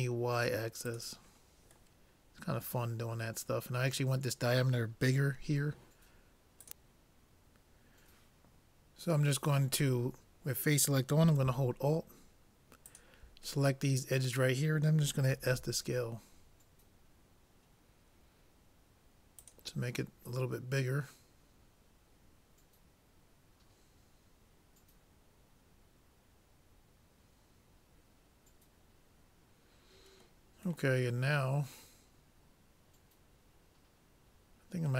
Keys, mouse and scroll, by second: 1.4-3.8 middle drag, 13.0-14.6 drag, 15.5 s, 20.1-22.1 middle drag, 30.9-32.9 middle drag.